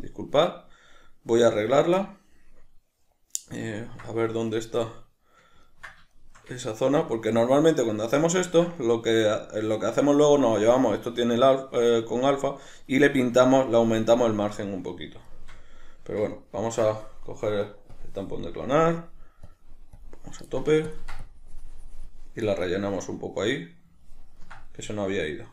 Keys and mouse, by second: 2.0-17.9 middle drag, 17.9-20.9 drag, 21.2-22.5 drag, 22.5-25.5 middle drag.